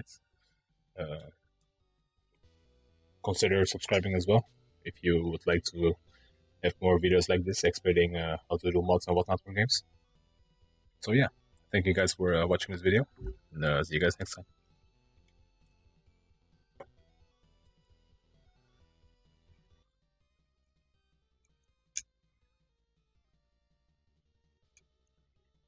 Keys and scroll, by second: 14.2 Return.